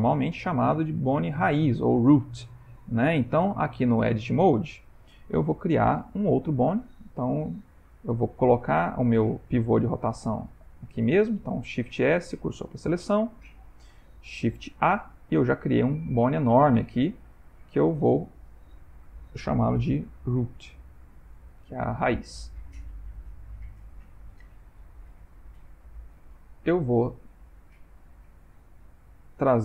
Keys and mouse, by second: 0.6 middle click, 2.3 shift+middle click, 4.1 Tab, 5.5 ctrl+middle click, 8.8 middle click, 10.5 click, 11.8 shift+s, 13.6 ctrl+middle click, 14.1 middle click, 14.8 shift+a, 15.4 middle click, 16.6 middle click, 16.7 ctrl+middle click, 17.0 ctrl+middle click, 17.4 click, 18.6 F2, 20.1 o, 22.7 ctrl+middle click, 23.3 ctrl+middle click, 23.6 shift+middle click, 25.6 click, 27.3 click, 29.1 click.